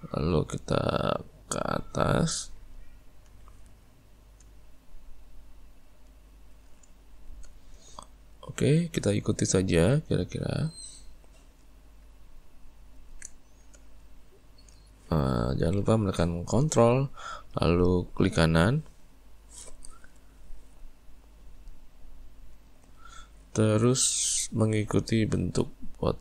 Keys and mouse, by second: 2.7 right click, 6.0 right click, 7.0-9.7 shift+middle drag, 9.7 ctrl+right click, 12.6 ctrl+right click, 13.4-16.4 shift+middle drag, 19.0 ctrl+right click, 22.5 ctrl+right click, 23.4-26.2 shift+middle drag.